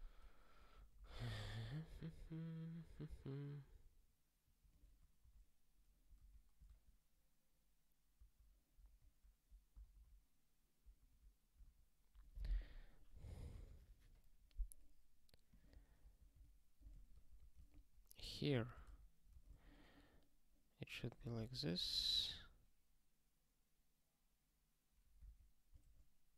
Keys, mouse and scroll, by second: 0.7 ctrl+n, 2.0 ^, 4.4 ^, 8.7 super+b, 9.7 super+b, 11.5 super+w, 15.5 click, 15.8 ctrl+b, 16.4 alt+d, 16.9 ctrl+/, 17.1 ctrl+p, 17.4 ctrl+e, 17.6 alt+b, 18.5 ctrl+b, 18.8 alt+d, 19.4 ctrl+s, 21.1 click, 21.5 ctrl+s, 21.9 ctrl+k.